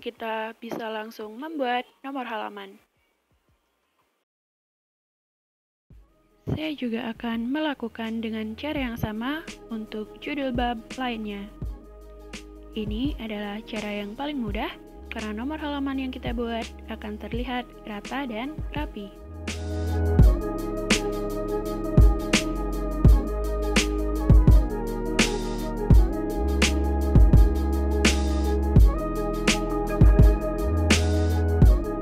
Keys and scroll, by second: 2.6 Return, 4.9-11.0 typing, 15.9-16.3 typing, 17.9 Return, 20.4 Caps_Lock, 22.0-22.4 typing, 23.6-25.4 typing, 27.1-32.0 typing.